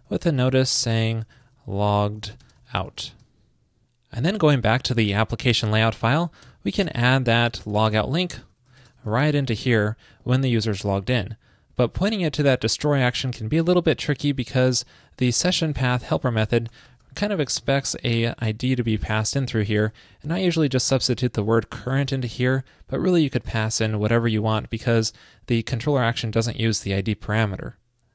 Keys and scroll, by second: 3.3 super+s, 7.0 ctrl+shift+>, 22.1 alt+shift+Left.